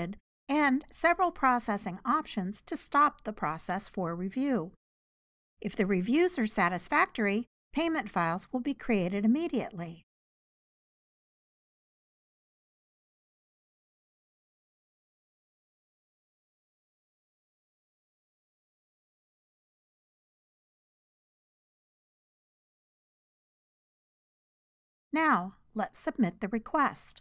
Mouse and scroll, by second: 14.3 click, 15.4 click, 15.6-22.2 drag, 22.9 click, 23.8-24.2 drag, 24.5-27.2 drag.